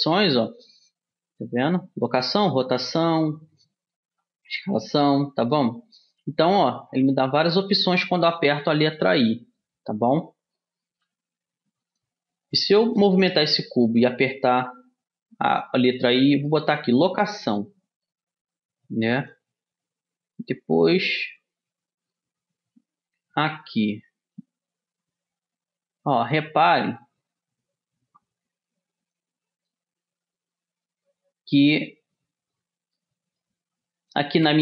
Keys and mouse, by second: 9.3-11.3 middle drag, 11.3 g, 14.0 i, 18.0-19.7 middle drag, 19.7-20.8 drag, 24.8-26.5 drag, 27.4 i, 29.5-31.6 drag, 31.0 i, 33.3 click.